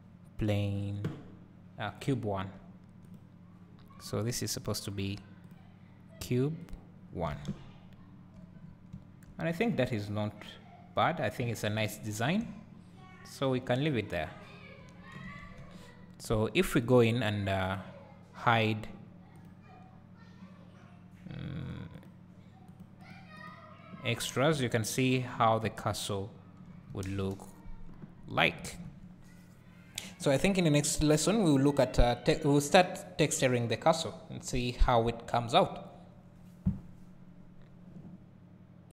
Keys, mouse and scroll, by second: 2.2 `, 3.2 click, 5.2 click, 6.8-22.8 drag, 7.3 alt+a, 8.6-9.0 scroll up 2, 12.0-12.7 scroll down 2, 12.7 `, 16.2 ctrl+s, 23.0 click, 23.4 click, 24.3-24.6 scroll down 1, 24.6 `, 25.4 scroll up 1, 25.6 `, 27.1 KP_0, 28.2 scroll down 1.